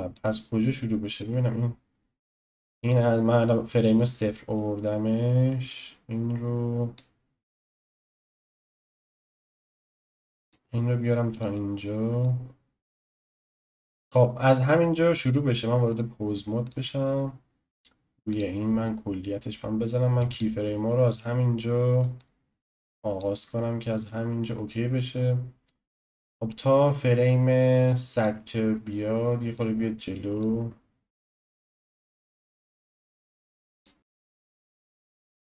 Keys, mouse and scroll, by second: 1.2-4.0 drag, 4.0-5.7 shift+middle drag, 5.7 click, 10.5 click, 12.2 drag, 13.6 Delete, 15.9-18.4 drag, 20.3 click, 22.2-25.2 drag, 26.5-29.7 drag, 31.3 drag.